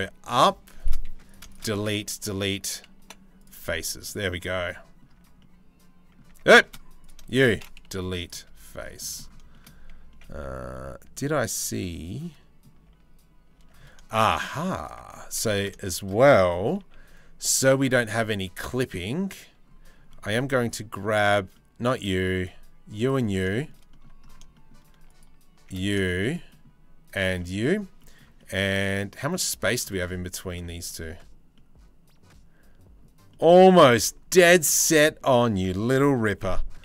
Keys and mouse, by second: 0.7 3, 2.6 Delete, 3.7-4.9 middle drag, 4.9 Tab, 5.9 Tab, 6.2 shift+middle click, 6.8 shift+middle click, 7.5 Delete, 8.2 shift+middle click, 9.1-10.3 shift+middle drag, 11.3 middle click, 12.6 Tab, 13.2 Tab, 13.7 shift+middle click, 14.1 middle click, 15.0 3, 15.1 click, 15.4 shift+click, 16.4 c, 23.2 shift+middle click, 23.5 middle click, 24.2 shift+middle click, 25.7 shift+middle click, 26.1 shift+middle click, 27.0 middle click, 27.6 middle click, 28.0-29.3 middle drag, 29.7 middle click, 30.1 z, 31.2-32.6 middle drag, 33.4 z, 35.9 g.